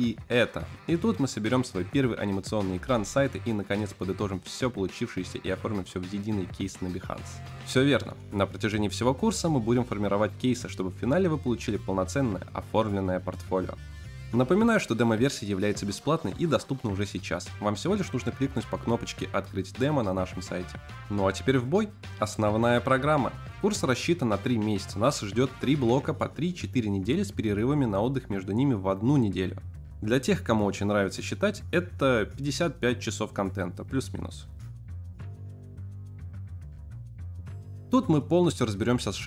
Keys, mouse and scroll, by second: 0.1 click, 0.2 click, 0.3 click.